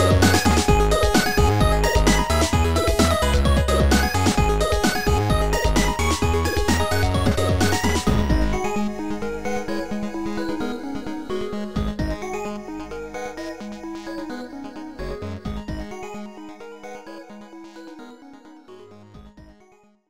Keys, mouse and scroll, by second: 0.6 click, 3.0 click, 4.1 click, 5.7 click, 8.2 shift+click, 9.7 shift+click, 11.9 shift+click, 13.3 shift+click, 14.2 shift+click, 15.1 Delete, 15.1 click.